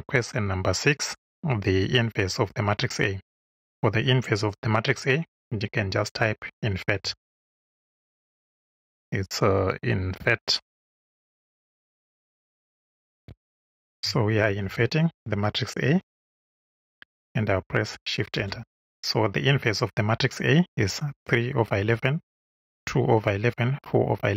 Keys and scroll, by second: 5.8-7.8 typing, 11.1 BackSpace, 12.1-14.6 typing, 15.8 shift+a, 18.3 shift+Return.